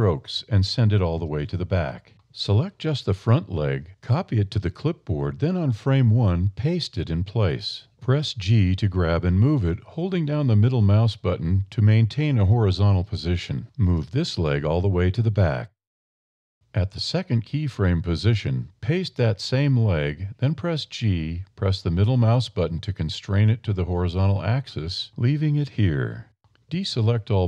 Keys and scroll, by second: 0.7 a, 2.9 1, 3.3 super+i, 3.7 super+c, 7.2 super+v, 8.4 g, 13.7 a, 20.8 super+v, 21.7 super+c, 21.8 g, 26.7 a.